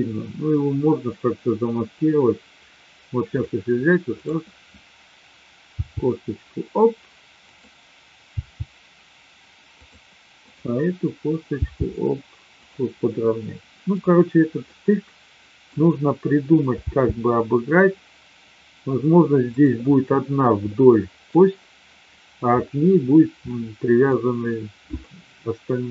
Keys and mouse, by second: 3.3 click, 4.1 click, 5.6 g, 8.3 g, 10.3 click, 11.5 g, 13.5-13.9 middle drag, 14.7-15.7 middle drag, 16.9 g, 20.7-21.3 middle drag, 23.3-24.1 middle drag, 25.1-25.9 middle drag.